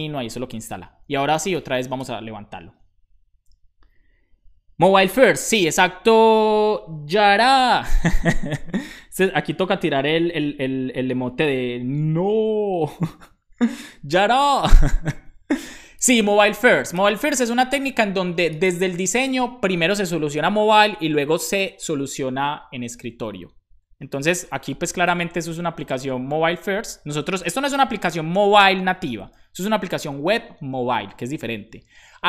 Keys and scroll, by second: 1.0-1.9 typing.